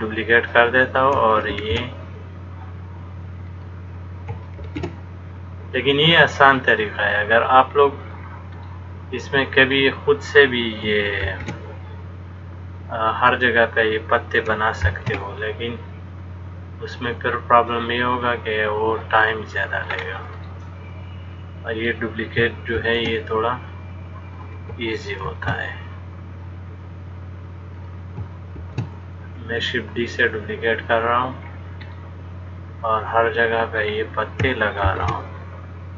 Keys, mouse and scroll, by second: 1.8 shift+d, 4.9 shift+d, 8.8 middle click, 11.5 shift+d, 15.0 shift+d, 20.2-21.3 scroll up 2, 20.6 middle click, 23.0 shift+d, 28.8 shift+d, 32.2 middle click, 35.1 shift+d.